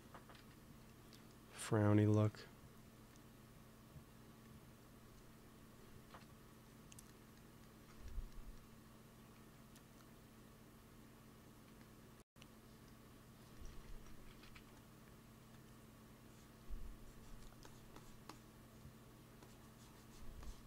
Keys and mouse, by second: 0.3 KP_3, 2.2 f, 2.9 f, 3.5-6.0 drag, 6.0 KP_1, 9.2 f, 10.0-11.6 drag, 11.6 f, 14.2 shift+c, 14.4 f, 15.3 f, 16.2-17.8 drag, 18.7-20.6 drag.